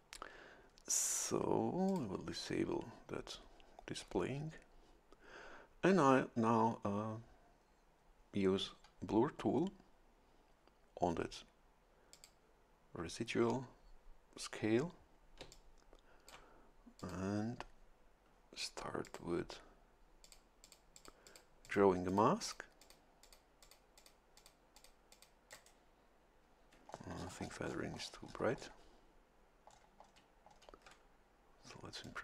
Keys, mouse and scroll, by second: 1.9 click, 12.1 click, 15.4 a, 15.5-16.5 drag, 17.0 click, 19.0 click, 20.2 click, 20.6 click, 21.6 click, 22.1 click, 22.8 click, 23.2 click, 23.6 click, 24.0 click, 24.4 click, 24.7 click, 25.1 click, 25.5 click, 25.5 right click, 26.9-27.9 shift+scroll down 2, 27.9-28.2 shift+scroll down 1, 29.7-30.7 shift+scroll down 4, 32.0-32.2 drag.